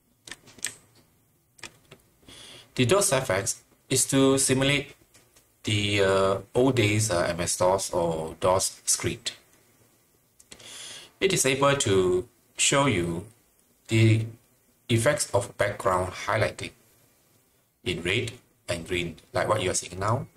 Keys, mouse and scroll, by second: 0.0-1.7 typing.